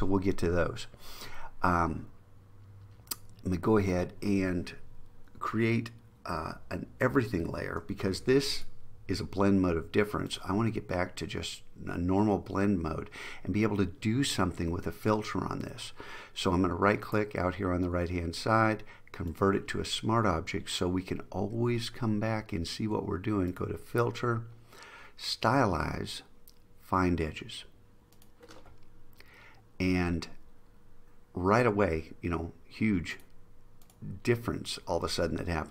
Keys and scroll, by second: 7.2 alt+shift+super+e.